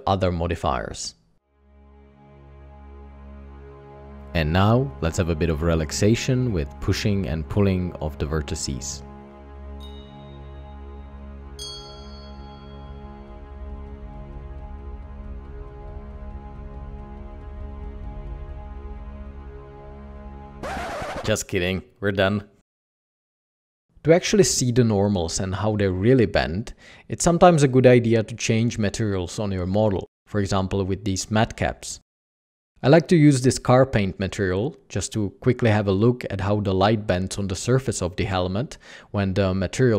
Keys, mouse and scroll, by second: 4.3 Tab, 4.9 alt+a, 5.0-8.8 typing, 5.7 alt+a, 7.0 alt+a, 8.5 alt+a, 9.3 alt+a, 9.3 Tab, 9.6 Tab, 11.1-12.1 typing, 11.8 alt+a, 13.1 typing, 13.2 Tab, 13.6 alt+a, 14.0 Tab, 14.7 Tab, 14.8-20.2 typing, 16.3 Tab, 17.4 Tab, 17.7 alt+a, 20.1 Tab, 20.3 alt+a.